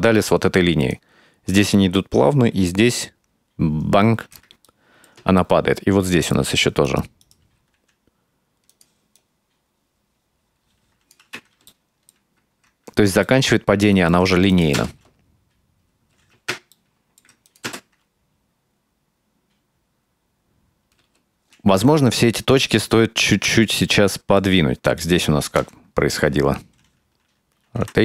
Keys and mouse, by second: 0.9-4.5 drag, 4.7 shift+middle click, 5.5 ctrl+middle click, 6.9 right click, 7.2 right click, 7.8 r, 9.2-11.2 drag, 11.7-12.1 alt+middle drag, 13.3 ctrl+middle click, 14.5 click, 14.8 space, 16.2 space, 16.8 ctrl+middle click, 17.5 click, 17.7 space, 21.0 space, 21.4 a, 22.2-24.5 ctrl+middle drag, 24.9 right click, 25.6 KP_Decimal, 27.9 r.